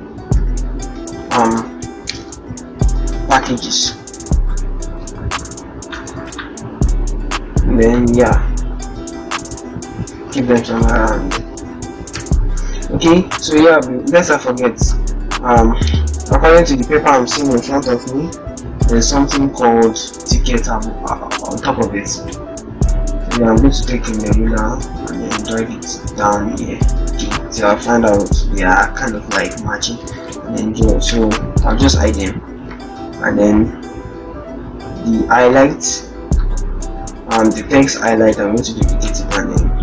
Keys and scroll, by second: 1.3 shift+t, 3.3 shift+p, 10.3 ctrl+-, 12.0 ctrl+0, 19.1 ctrl+shift+t, 29.8 ctrl+z, 32.2 ctrl+h, 37.5 ctrl+j.